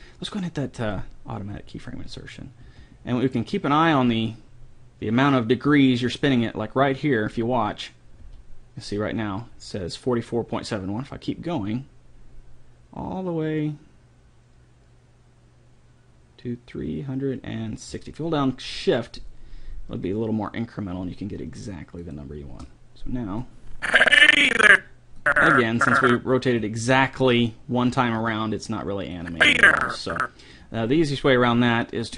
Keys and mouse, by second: 0.8-2.6 drag, 2.6 r, 8.2 r, 23.5-27.1 drag, 29.3-30.5 drag.